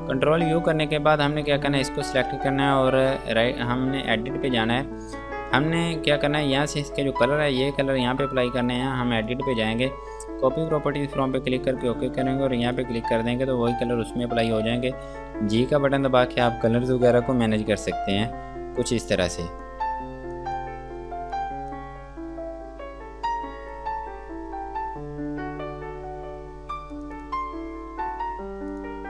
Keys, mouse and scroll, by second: 0.1 F2, 0.5 click, 2.9 scroll down 1, 4.3 click, 9.4 click, 15.6 g, 17.2 click, 19.9 click, 27.2 click.